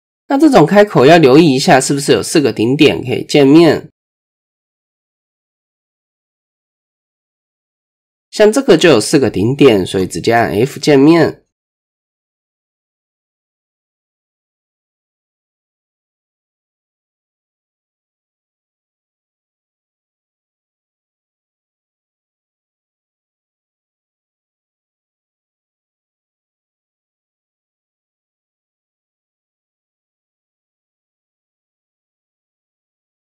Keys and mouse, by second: 0.2 middle click, 0.9 shift+middle click, 1.4 middle click, 2.1 shift+middle click, 3.1 shift+middle click, 4.3 click, 4.8 middle click, 5.5 shift+middle click, 7.3 click, 13.0 f, 15.3 middle click, 16.1-17.7 middle drag, 18.0 middle click, 18.7 KP_1, 19.9 shift+middle click, 21.0 Tab, 21.5 shift+middle click, 22.6 shift+middle drag, 23.0 Tab, 23.9 middle click, 24.7 shift+middle click, 25.8 middle click, 26.7 middle click, 27.5-28.6 drag, 29.7 Tab, 30.6 KP_1, 31.6-31.9 shift+drag, 32.4 Tab, 33.1 ctrl+z.